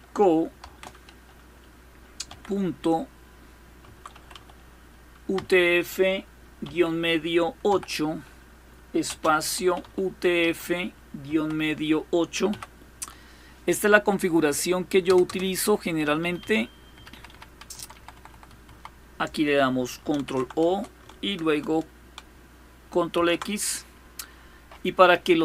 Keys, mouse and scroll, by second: 0.0-0.2 typing, 1.9 typing, 3.3-4.0 typing, 5.0 typing, 6.3 typing, 7.3 typing, 8.7-10.9 typing, 12.1 typing, 14.4-18.4 typing, 19.6-20.8 typing, 22.5-23.5 typing.